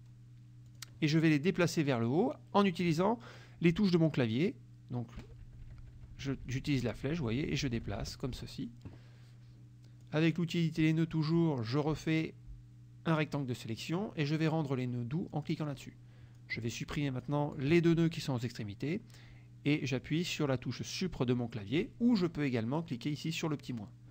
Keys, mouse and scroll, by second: 0.7 click, 5.3 Up, 10.1-13.6 drag, 15.4 click, 16.4 click, 17.3 shift+click.